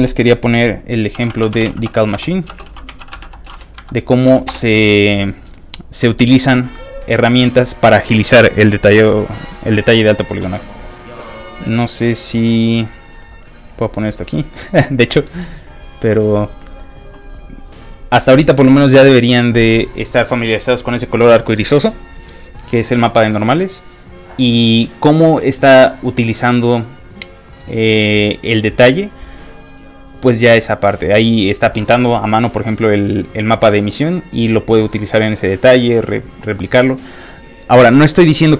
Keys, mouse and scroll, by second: 0.9-4.3 typing, 4.5 Return, 9.7 click, 11.6-12.8 drag, 15.4 click, 18.0 click.